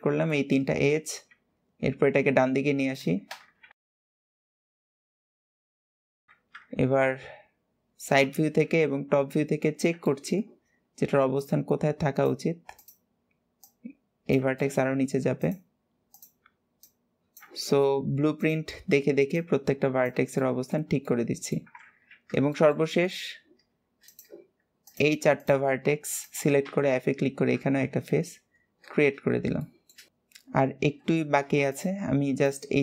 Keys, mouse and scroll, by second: 0.1 shift+middle click, 0.5-1.1 scroll up 2, 3.7 click, 4.9 click, 5.8 shift+click, 6.1 shift+click, 9.0-9.9 scroll up 2, 9.9 shift+middle click, 10.4-11.2 scroll up 1, 11.2 click, 12.6 click, 13.4 click, 14.4-15.2 shift+middle drag, 15.2 click, 15.9 click, 17.4-18.2 shift+middle drag, 18.2 click, 19.2 click, 20.2-21.6 shift+middle drag, 21.9-22.3 scroll down 1, 22.3 shift+middle click, 22.8-23.8 scroll up 2, 23.8 click, 24.6 shift+click, 25.1 shift+click, 26.0 shift+click, 26.7 scroll down 1, 28.4-29.4 scroll down 4, 29.4 shift+middle click, 29.8 scroll up 2, 31.5 shift+click, 32.2 shift+click.